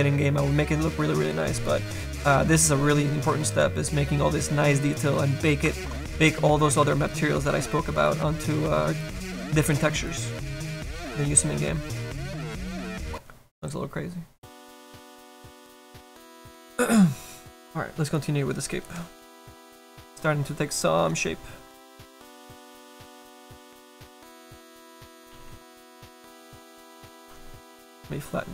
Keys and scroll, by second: 24.4 s, 25.0 s.